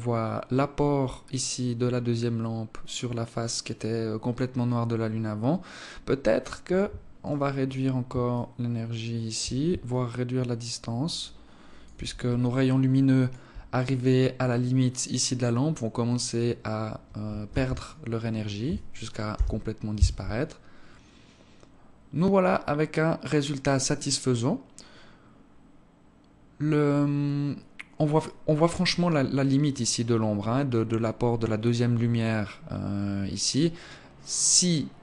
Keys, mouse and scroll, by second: 6.0 Escape, 6.8 right click, 7.9 shift+click, 9.4 shift+click, 11.9 alt+click, 17.0 ctrl+s.